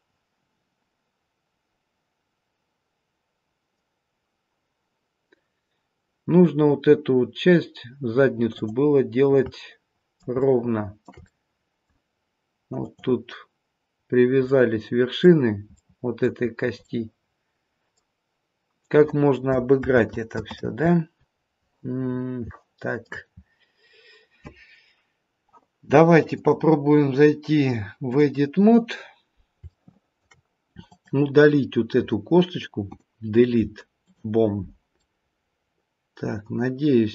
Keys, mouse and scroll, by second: 8.9-9.3 scroll down 2, 9.3 middle click, 10.3 shift+middle click, 11.2 middle click, 12.7 click, 14.4 middle click, 15.7 middle click, 16.4-16.8 scroll up 2, 16.8 middle click, 19.8 ctrl+z, 20.4 ctrl+z, 22.0-22.5 scroll down 5, 22.5 shift+middle click, 23.3-25.1 scroll up 1, 26.2 click, 28.6-29.2 scroll up 2, 29.6 shift+middle click, 30.8 click, 33.8 Delete, 34.9 middle click.